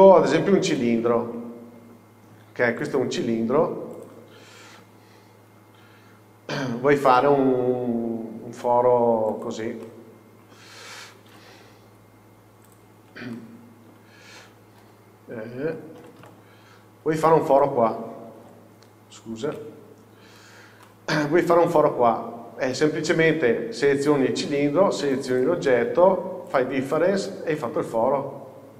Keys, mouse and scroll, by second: 1.8 scroll down 1, 2.0-3.0 middle drag, 2.4 s, 3.0 click, 3.6 s, 4.1 click, 4.8 KP_5, 5.5 scroll down 1, 6.0 s, 7.2 click, 7.4-7.8 scroll up 1, 8.3 s, 9.5 click, 9.9 scroll up 1, 9.9 middle click, 11.4 g, 12.8 click, 13.1-13.4 scroll down 1, 13.4 middle click, 14.9 d, 15.7 Escape, 16.1 g, 17.4 click, 17.7 middle click, 18.4-25.4 middle drag, 18.4 z, 19.7 KP_6, 20.8 scroll up 1, 25.4 shift+click, 26.6 click, 27.4-27.7 scroll down 1, 27.7 middle click, 28.3-28.7 scroll up 2.